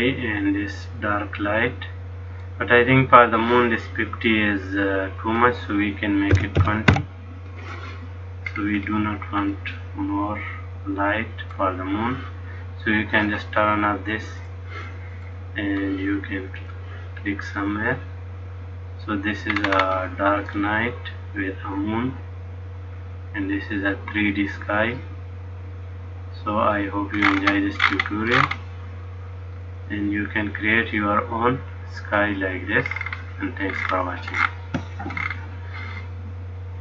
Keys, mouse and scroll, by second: 5.4 click, 8.6-9.1 scroll down 3, 9.6 middle click, 14.6 click, 15.5 middle click, 16.7 click, 17.7 middle click, 19.7-20.7 scroll up 5, 20.7 middle click, 27.4-28.9 scroll up 23, 29.7 scroll up 1, 29.8 middle click, 32.9-35.3 scroll down 18, 35.3-36.2 scroll down 9.